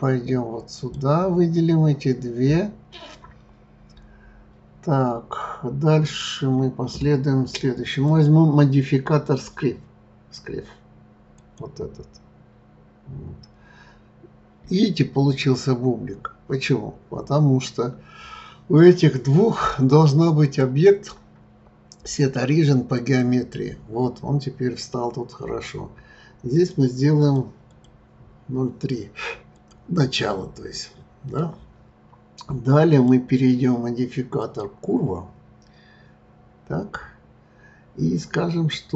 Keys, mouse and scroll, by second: 0.7 click, 8.0 click, 14.8-17.8 scroll up 5, 20.4 click, 26.5 click, 29.5 click, 30.2-32.9 middle drag, 32.9 click, 36.4-37.2 scroll down 3, 37.2-38.9 scroll down 1.